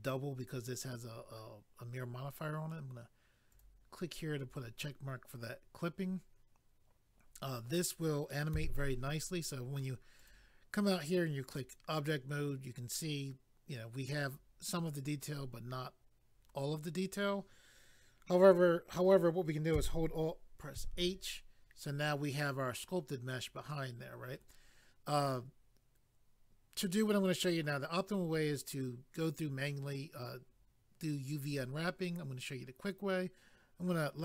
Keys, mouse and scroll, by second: 3.5 click, 3.6 click, 10.2 click, 10.3 click, 11.4 click, 11.5 click, 20.7 alt+h, 33.8 click.